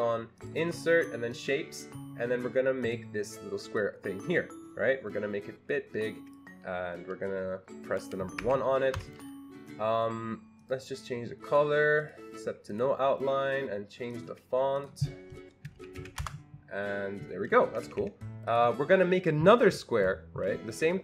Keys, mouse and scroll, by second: 0.3 click, 1.3 click, 2.8 click, 3.8-10.6 drag, 8.4 1, 9.0 Escape, 11.4 click, 12.0 click, 12.7 click, 14.1 click, 15.5-16.5 typing, 17.6 Escape, 17.9 Escape, 18.0 Escape, 18.5 click.